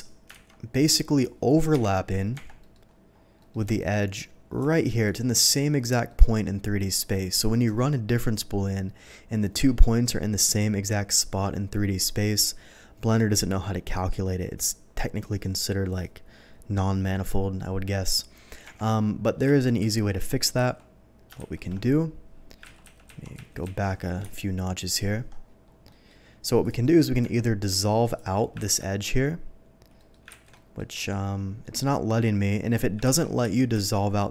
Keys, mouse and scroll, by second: 0.4 alt+v, 1.1 click, 1.7 KP_Divide, 2.3 Tab, 2.6 middle click, 3.1 scroll up 1, 3.4 middle click, 3.7 shift+middle click, 5.0 alt+click, 6.0 alt+middle click, 17.8 middle click, 18.6 Tab, 19.5 ctrl+z, 19.8 ctrl+z, 21.3 ctrl+shift+z, 22.8 ctrl+z, 24.2 KP_Divide, 25.4-25.8 scroll down 1, 25.8 middle click, 26.6 click, 26.8 middle click, 27.3 Tab, 28.0 click, 28.6 ctrl+x, 29.9 ctrl+middle click, 30.5 ctrl+x, 30.5 ctrl+middle click, 30.9 ctrl+middle click, 33.0 ctrl+x, 33.5 ctrl+x.